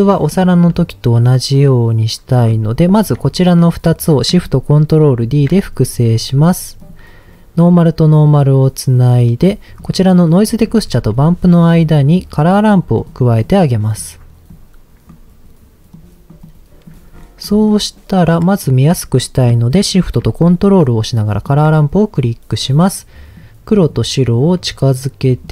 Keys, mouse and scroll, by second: 0.1 middle click, 2.8 shift+click, 5.2 ctrl+shift+d, 6.8 click, 7.6 click, 8.9 click, 9.7 click, 10.1 click, 10.8 shift+a, 13.4 click, 14.5 click, 15.9 click, 16.4 click, 17.1-18.1 scroll up 3, 17.4 middle click, 21.3 ctrl+shift+click, 22.1-23.3 scroll up 3, 23.3 click, 24.3-25.4 drag.